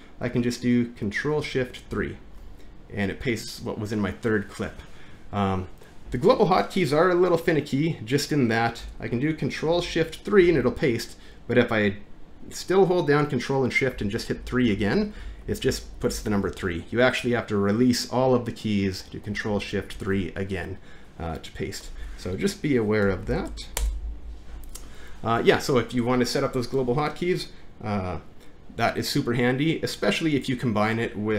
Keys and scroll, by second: 1.9 ctrl+shift+3, 1.9 ctrl+v, 8.8 Return, 10.4 ctrl+shift+3, 10.6 ctrl+v, 14.0-16.2 typing, 19.9 3, 20.0 ctrl+v, 22.0 shift+Home, 23.4 shift+Up, 23.8 BackSpace.